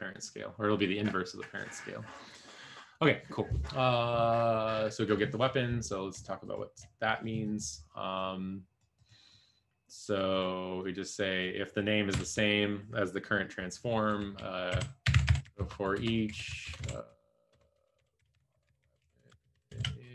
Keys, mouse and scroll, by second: 12.1 BackSpace, 14.8-20.1 typing.